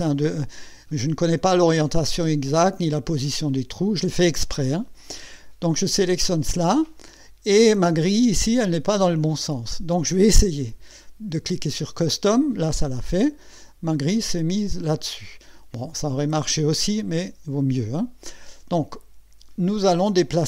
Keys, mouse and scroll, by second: 11.4 click.